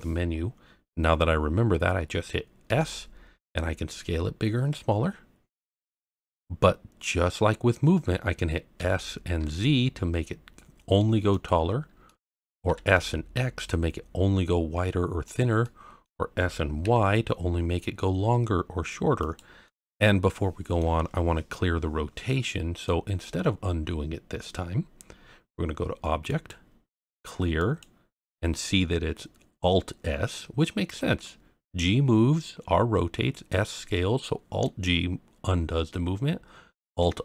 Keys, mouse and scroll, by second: 2.7 s, 5.9 click, 6.6-7.1 scroll down 1, 7.1-8.7 scroll up 1, 8.7 s, 9.4 z, 11.3 click, 11.6-12.0 scroll down 1, 12.0 middle click, 12.6 s, 12.9 x, 15.2 click, 15.6 middle click, 16.3 s, 16.8 y, 19.2 click, 19.6-20.8 middle drag, 22.8-23.2 middle drag, 26.3-37.2 drag.